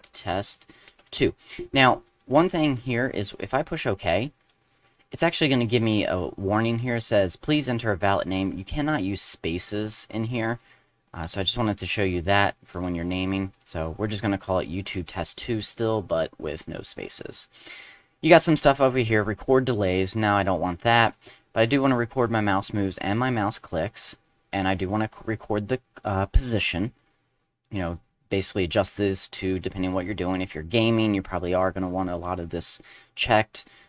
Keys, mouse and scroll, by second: 0.0-1.0 typing, 4.4 click, 9.1 click, 10.5 click, 11.2 BackSpace, 11.7 click, 12.7 BackSpace, 13.5 click, 19.9 click, 22.3 click, 22.8 click.